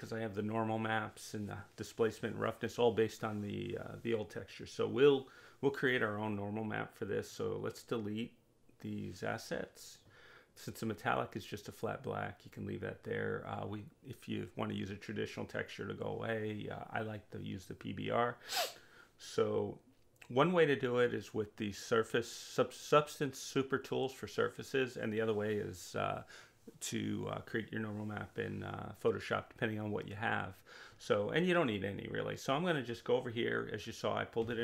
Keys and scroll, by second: 23.2 space.